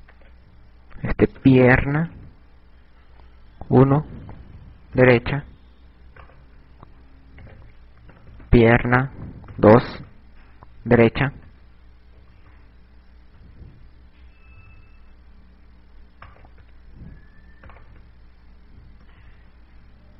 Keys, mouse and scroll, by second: 1.0 click, 6.7 right click, 8.3 click, 11.0 KP_6, 11.1 KP_6, 15.1 KP_6, 15.7 KP_6, 16.9 right click, 18.5 right click, 19.6 KP_Add, 19.6 KP_Add.